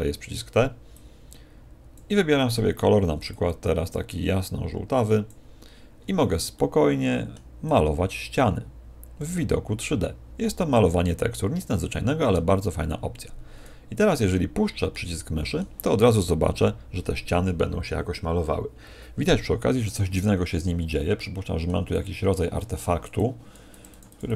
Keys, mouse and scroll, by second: 0.9 click, 3.2 click, 6.5 middle click, 7.6 click, 14.8 middle click, 20.3-20.8 scroll up 1, 20.8 scroll up 5, 21.1 middle click, 21.9 click, 23.2-24.3 click.